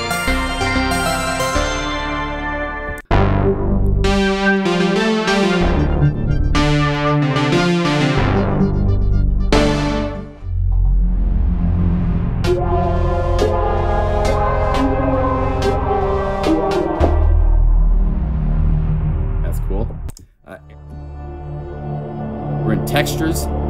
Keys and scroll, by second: 0.0 F4, 0.8 F4, 4.6 F4, 5.4 F4, 7.4 F4, 10.3 F1, 10.4 F2, 12.4 F4, 16.7 F4, 20.8 F4.